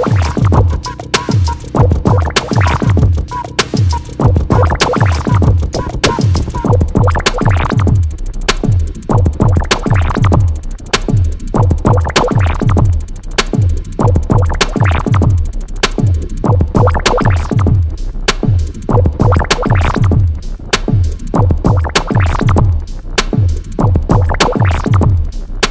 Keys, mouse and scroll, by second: 0.0 click, 1.4 right click, 2.5 click, 3.9 click, 9.4 click, 12.2 click, 14.7-18.7 drag, 18.7-21.4 drag, 21.4-23.5 drag.